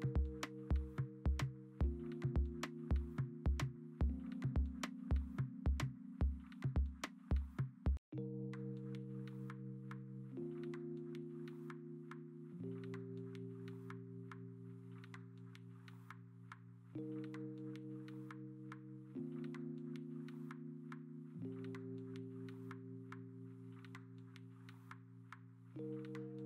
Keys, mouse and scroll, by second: 0.0-2.3 typing, 2.5 ctrl+t, 5.5 ctrl+z, 5.9 ctrl+t, 6.4 v, 9.5 ctrl+alt+g, 10.9 ctrl+alt+g, 14.5-15.9 typing, 15.8 ctrl+alt+z, 17.7 ctrl+z, 18.2 ctrl+z, 18.3 3, 19.8 ctrl+j, 21.8 v, 23.5 alt+Tab, 24.0 ctrl+u, 24.6 ctrl+t.